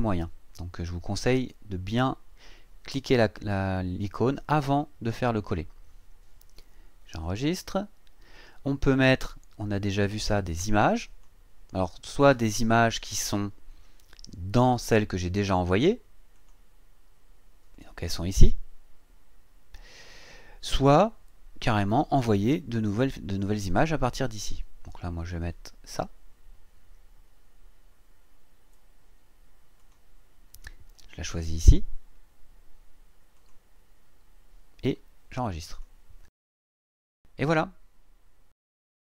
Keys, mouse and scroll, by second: 7.1 click, 9.8-11.4 drag, 14.7 click, 16.4 click, 25.3 click, 29.0-29.4 scroll up 2, 29.8 click, 33.4 click, 35.7 click.